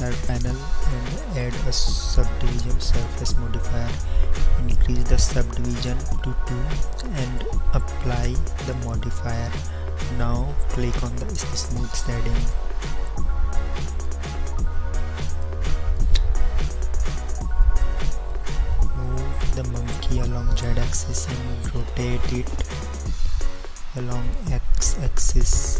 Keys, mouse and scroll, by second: 0.4-2.3 drag, 17.8-19.0 drag, 19.1 click, 23.6 r.